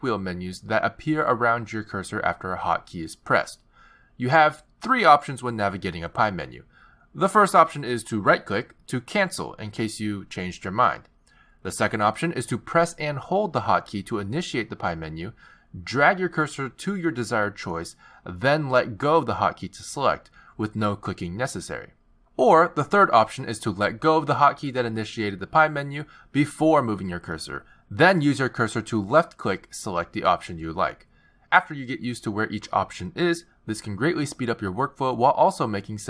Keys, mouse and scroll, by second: 2.0 t, 6.9 z, 11.0 z, 24.1 z, 25.6 z.